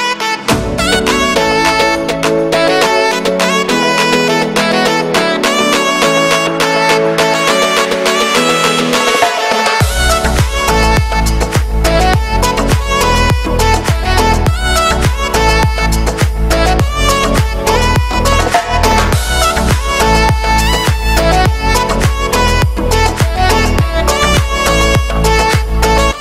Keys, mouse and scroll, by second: 0.7 ctrl+KP_Add, 1.2 scroll down 1, 1.4 scroll up 2, 1.6 g, 3.4-4.4 middle drag, 4.4-5.4 scroll down 2, 5.4 right click, 6.0 middle click, 6.3 ctrl+r, 9.0 z, 10.0-12.7 typing, 11.6 shift+middle click, 13.1 scroll up 1, 13.3 shift+middle click, 13.6 ctrl+r, 15.6 click, 16.0 ctrl+r, 16.7 scroll down 1, 16.9 shift+middle click, 17.0 scroll up 2, 17.2 ctrl+r, 17.9-18.4 scroll down 2, 18.2 z, 18.4 a, 18.9 scroll up 1, 19.1 z, 19.4 ctrl+KP_Add, 19.6 ctrl+KP_Add, 20.2 KP_Subtract, 20.4 KP_Subtract, 20.5 KP_Subtract, 21.0 KP_Subtract, 21.4 scroll up 1, 21.5 shift+middle click, 22.0 KP_3, 22.4 ctrl+KP_1, 23.0 z, 23.1 a, 23.3 a, 24.2 b, 25.2-25.8 scroll up 2, 25.4 shift+middle click.